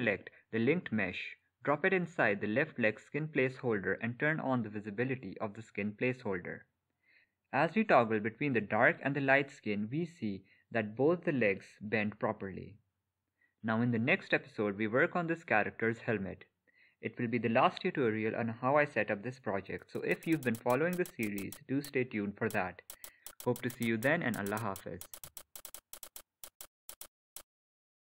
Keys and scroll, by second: 7.4 Escape.